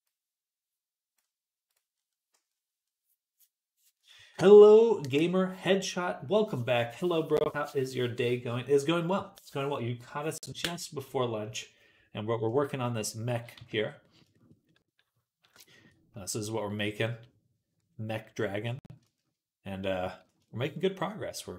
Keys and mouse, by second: 13.4 z, 20.5-21.5 middle drag.